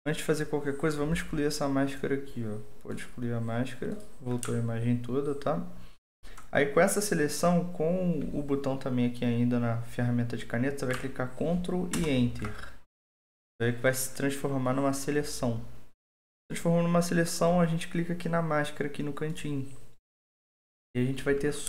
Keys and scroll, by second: 11.9 ctrl+Return.